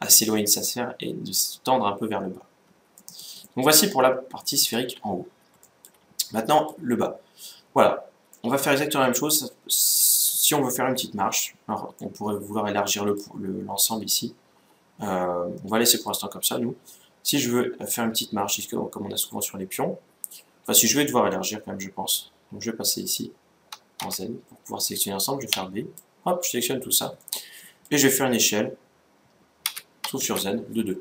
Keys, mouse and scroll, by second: 2.1-2.7 scroll down 1, 2.7-4.9 middle drag, 5.3-7.9 middle drag, 7.9 middle click, 8.2-9.8 middle drag, 11.7-13.4 middle drag, 14.3 a, 23.7 z, 25.3 b, 26.9-28.5 middle drag, 28.8 middle click, 29.4 s.